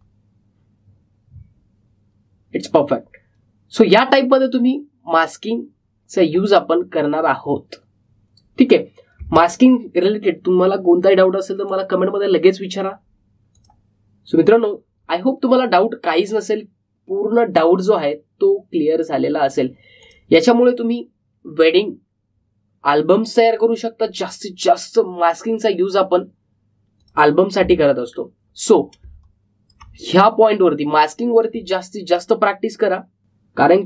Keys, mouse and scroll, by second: 10.1 space, 14.5 click, 21.0 click, 24.4 click, 27.9 click, 29.1-29.4 alt+scroll down 1, 29.7 alt+scroll up 1, 30.0 space, 30.1 click, 30.5 space, 32.7 click, 33.0 space, 33.1 click.